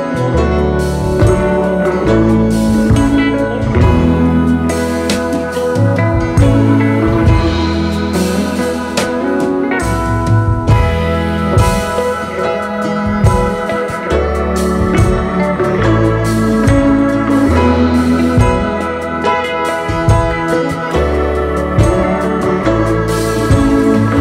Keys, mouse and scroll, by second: 3.6 Return, 9.3 double click, 21.1 space, 21.2 double click.